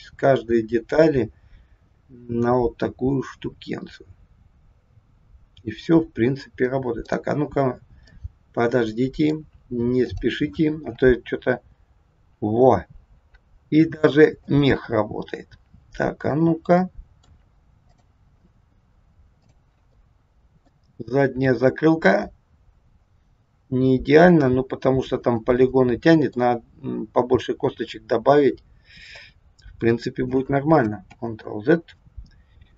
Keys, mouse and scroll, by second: 0.5 scroll down 1, 7.0 click, 8.1 middle click, 10.0 click, 11.5 r, 16.3 click, 16.9 middle click, 17.9 click, 19.5 click, 19.9 middle click, 20.9 r, 25.5 middle click, 31.1 ctrl+z.